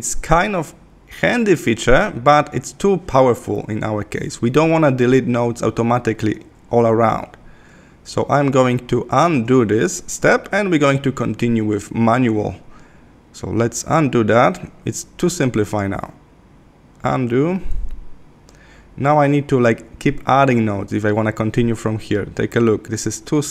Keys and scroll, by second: 16.0 super+=.